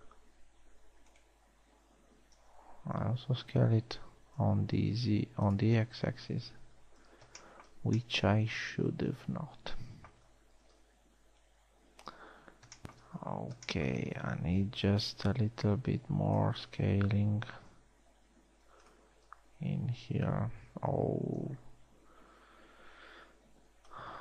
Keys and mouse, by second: 0.9 s, 2.8 s, 7.5 a, 8.1 middle drag, 12.0 KP_3, 13.0 z, 14.8 a, 15.3 a, 15.7 b, 18.2 s, 19.9 a, 20.1 n, 20.7 a, 22.2 n, 23.1 a.